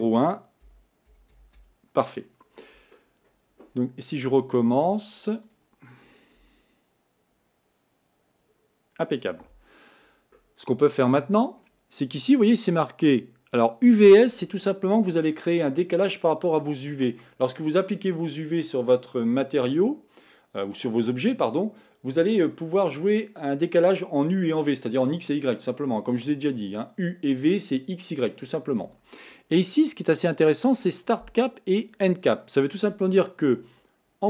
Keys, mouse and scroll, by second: 5.5 click, 6.6 r, 11.4 click.